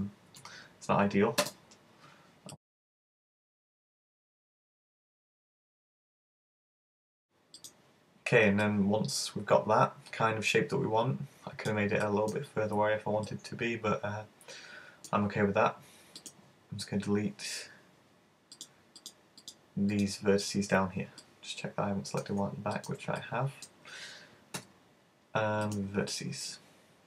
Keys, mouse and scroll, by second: 2.5 click, 2.6 space, 3.1 g, 3.9 click, 4.2 right click, 4.4 shift+right click, 4.4 space, 4.8 g, 5.7 click, 6.0 right click, 6.2 shift+right click, 6.3 space, 6.7 g, 7.7 click, 8.3-8.6 scroll down 2, 8.6 middle click, 10.0 middle click, 12.0 middle click, 12.9-13.4 scroll up 1, 13.4 middle click, 16.2 right click, 16.5 shift+right click, 18.6 shift+right click, 19.0 shift+right click, 19.4 shift+right click, 20.0 shift+right click, 21.3 middle click, 22.8 shift+right click, 23.3 middle click, 24.7 x, 26.2 middle click.